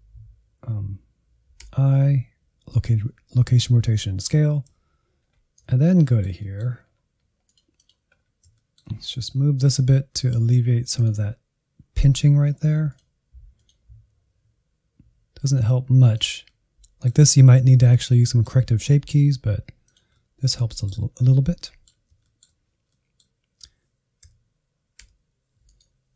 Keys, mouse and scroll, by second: 1.6 i, 4.8 Up, 5.2-6.0 scroll up 1, 6.0-7.4 shift+middle drag, 7.4 click, 8.1-8.5 scroll up 1, 8.5-9.6 shift+middle drag, 9.6 g, 12.9-14.2 drag, 14.2 g, 16.1 click, 16.4-19.1 middle drag, 19.1 g, 20.1 middle click, 21.1-21.6 scroll down 2, 21.6-24.3 middle drag, 24.3 a, 25.0 i.